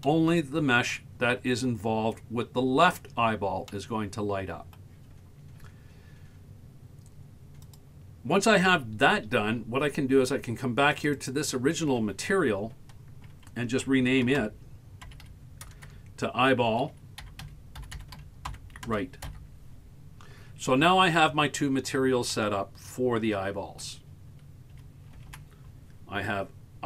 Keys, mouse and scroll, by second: 0.1 middle click, 3.7-4.9 middle drag, 7.7 click, 10.9 click, 11.2-13.3 drag, 15.9 BackSpace, 18.0 l, 18.9-20.9 shift+drag, 21.6-22.1 scroll down 2, 22.4-23.9 middle drag, 24.7 a, 25.2 a, 25.3 a.